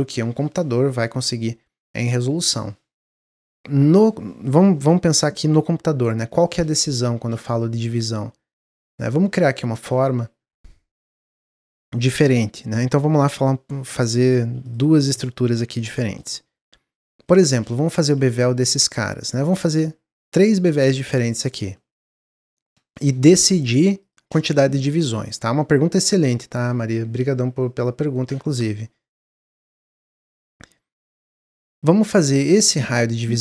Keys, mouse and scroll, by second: 6.0-6.5 scroll up 2, 6.5 middle click, 7.1 shift+a, 9.3-10.3 middle drag, 10.3 KP_Decimal, 10.9 scroll up 1, 11.2 scroll down 2, 11.5 Tab, 12.1-13.8 drag, 13.8 i, 15.5 e, 16.2 middle click, 17.0 2, 17.2 click, 17.8 shift+click, 18.2 shift+click, 18.6 middle click, 19.1 click, 20.3 click, 21.3 shift+click, 21.7 middle click, 22.5 shift+click, 22.9-23.9 middle drag, 23.9 shift+click, 26.0-31.9 middle drag, 31.9 ctrl+b.